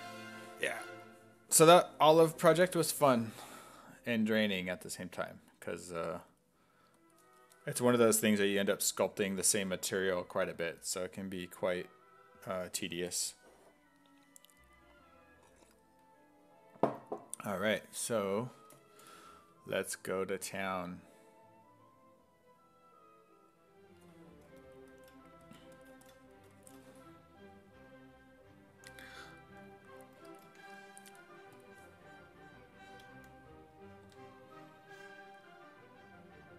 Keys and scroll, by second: 34.1 w.